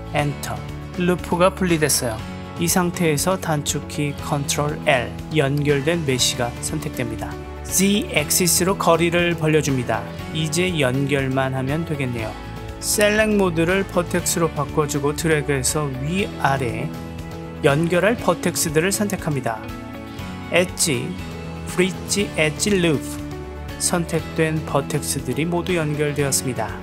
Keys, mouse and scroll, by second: 0.2 Return, 7.4 KP_1, 8.9 g, 13.1 click, 13.3-14.4 middle drag, 15.1 click, 15.8 KP_1, 16.9 shift+click, 17.2-18.2 drag, 18.9-19.9 middle drag, 20.8-23.3 drag, 26.6 Tab.